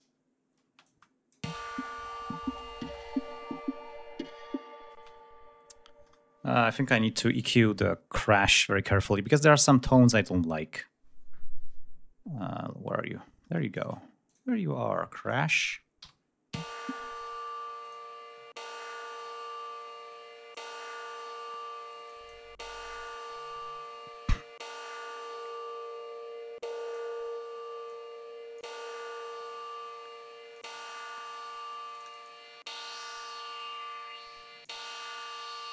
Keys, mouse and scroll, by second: 0.8 space, 1.0 click, 1.6 space, 1.9-2.6 scroll down 1, 2.7-3.1 ctrl+scroll up 2, 4.3 scroll up 2, 5.1 space, 6.7-7.0 scroll down 2, 7.8-8.6 scroll down 4, 8.8-9.1 scroll up 2, 10.3-10.7 scroll down 2, 11.0 scroll down 2, 11.8-12.2 scroll down 2, 12.6 scroll up 2, 13.9 click, 14.4 click, 15.3 r, 15.4 click, 16.7 l, 17.3 click, 18.0 click, 20.7 click, 22.2 click, 23.1 click, 24.7-27.3 drag, 27.5-27.8 scroll up 1, 28.0 click, 29.3-29.8 scroll down 1, 35.0 scroll down 1.